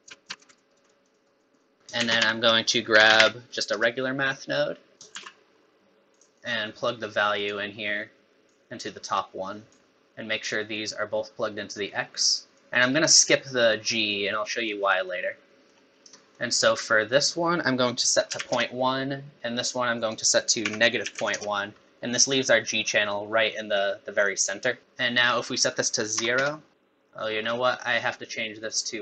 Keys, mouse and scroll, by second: 0.1 click, 0.1 shift+d, 0.3 shift+d, 0.6 alt+right click, 0.7 alt+right click, 0.9 click, 1.1 click, 1.4 click, 1.6 click, 1.8 middle click, 1.8 click, 1.8 scroll up 3, 2.0 shift+a, 4.9 middle click, 4.9 click, 5.1 shift+d, 6.3 middle click, 6.4 click, 8.5 click, 10.7 click, 12.6 click, 15.3 middle click, 15.9 scroll up 3, 16.2 middle click, 17.1 click, 20.0 click, 24.8 middle click, 24.8-25.6 scroll down 3, 25.6 click, 27.1 middle click, 27.5 scroll up 4, 28.6 click.